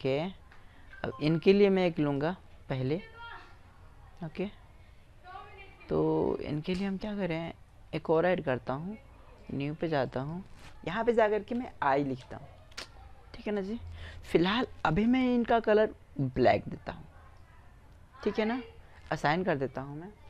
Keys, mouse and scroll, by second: 1.5-3.3 drag, 5.1-6.9 middle drag, 6.9-11.4 drag, 14.3-15.2 drag, 19.7 Tab.